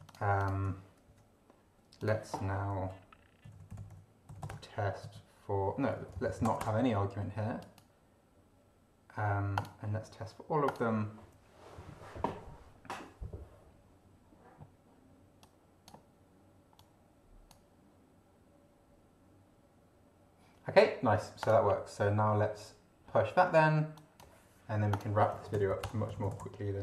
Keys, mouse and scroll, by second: 0.1-0.7 ctrl+drag, 1.1 ctrl+Delete, 2.0 click, 2.7-5.0 typing, 6.2 ctrl+shift+Left, 6.6 ctrl+shift+BackSpace, 7.6 click, 9.6 click, 10.7 click, 15.4-16.0 drag, 16.8 click, 21.4 click, 23.9 click, 24.9 click, 25.0-26.8 typing.